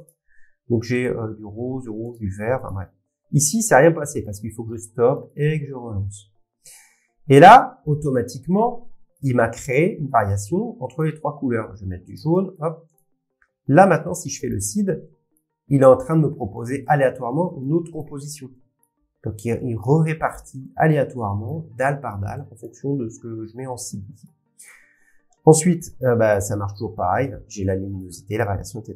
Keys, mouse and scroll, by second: 4.3 click, 11.0 click, 12.5 click, 14.5 click, 18.4-20.5 drag, 21.1-23.9 drag, 26.7 click, 28.0 click.